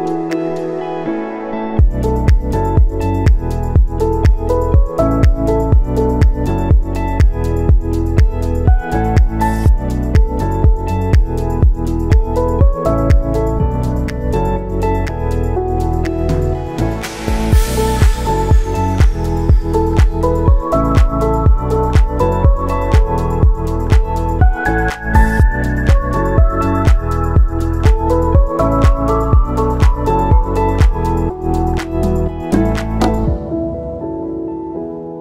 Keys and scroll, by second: 2.7 space, 17.6 space, 17.9 ctrl+s, 29.5 space.